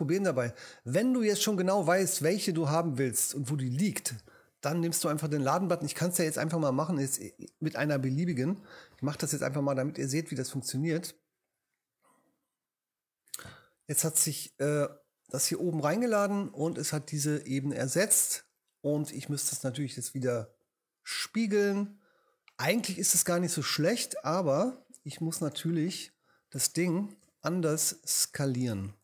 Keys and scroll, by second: 27.2 space, 28.4 super+space.